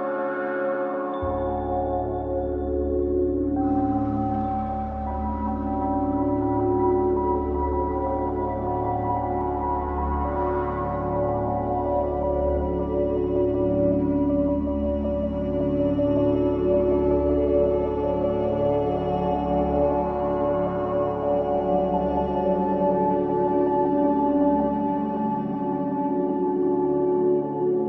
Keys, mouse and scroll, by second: 0.3-3.3 drag, 4.9 shift+a, 9.9 ctrl+alt+KP_0, 11.5 click, 12.2-16.8 drag, 18.3 click, 20.4 click, 27.5-27.8 drag.